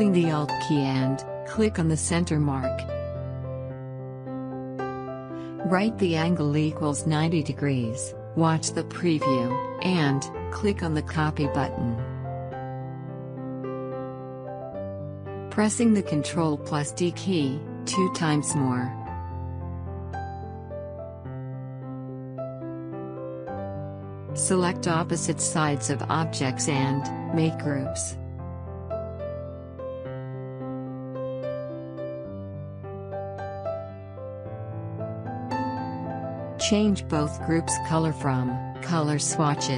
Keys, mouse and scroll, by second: 1.9 click, 2.1 click, 5.9 click, 9.6 click, 16.7 ctrl+Num_Lock, 16.7 click, 17.4 ctrl+d, 19.0 ctrl+d, 20.8 click, 26.9 click, 28.2 shift+click, 28.7 right click, 30.1 click, 32.1 shift+click, 32.7 right click, 34.0 click, 36.0-36.5 alt+scroll down 2, 36.5-37.8 scroll up 1, 37.8 space, 38.0 click, 38.4 space, 39.3 click.